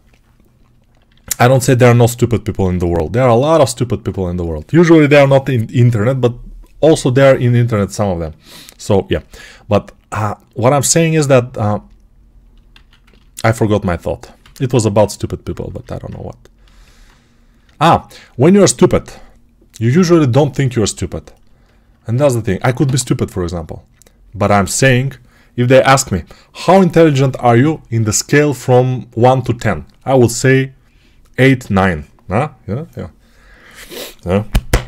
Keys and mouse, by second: 0.9 alt+q, 0.9-8.6 alt+drag, 2.5 g, 8.6 right click, 8.7-12.6 alt+drag, 12.6 alt+q, 12.6-16.5 ctrl+alt+right drag, 14.3 ctrl+z, 14.6 1, 22.4 alt+right click.